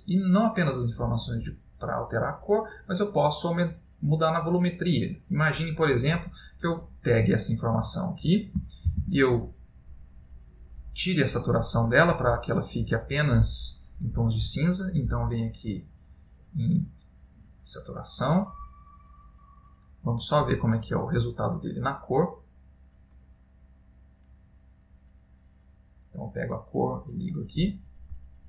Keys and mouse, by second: 0.2 middle click, 2.1 click, 5.2 click, 6.6 middle click, 7.6 click, 8.9 shift+a, 18.4 click, 25.3 click, 26.3 click.